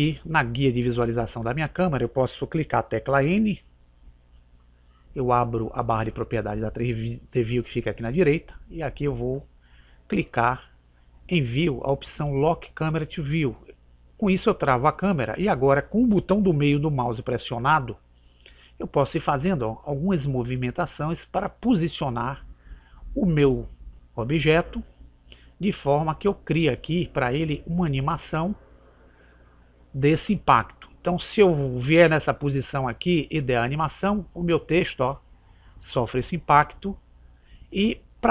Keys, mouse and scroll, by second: 4.0 n, 8.9-11.4 middle drag, 14.4-16.1 drag, 18.6-20.7 middle drag, 24.0-25.7 middle drag, 26.6-27.4 scroll down 1, 27.4-29.9 middle drag, 32.4-35.3 drag, 37.6-38.3 drag.